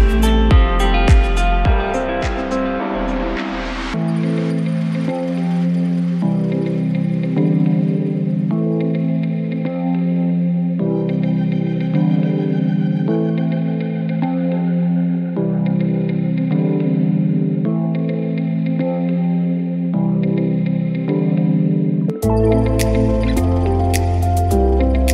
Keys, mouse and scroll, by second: 3.7 click, 6.0 Tab, 7.5 alt+click, 8.4 e, 13.2 right click, 15.1 ctrl+f, 17.6 click, 18.3-19.2 scroll down 2, 21.1 click, 22.3 right click, 25.0 click.